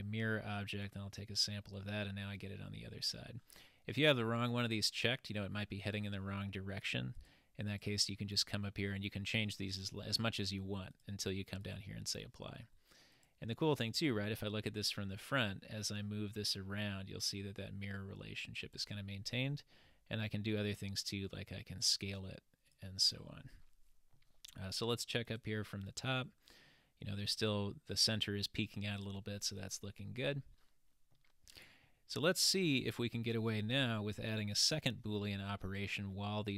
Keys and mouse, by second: 4.1 click, 4.5 click, 7.2 click, 7.7 click, 11.0 click, 13.2 click, 15.5-18.8 drag, 23.4-24.3 middle drag, 25.4 click, 31.1-31.9 middle drag, 34.5 click.